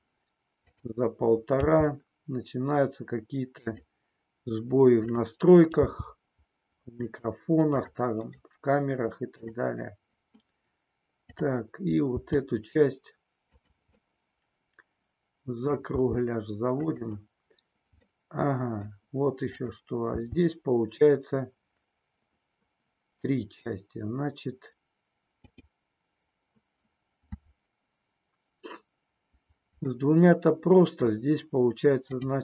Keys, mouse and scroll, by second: 1.6 g, 3.6 click, 5.1 click, 5.9 g, 7.0 click, 7.7 click, 8.6-12.0 right drag, 12.0 g, 13.5 click, 14.1-16.0 middle drag, 16.0 g, 16.7 click, 18.2 middle click, 19.5 click, 20.2 g, 25.5 click, 30.0-31.0 middle drag, 32.0 click.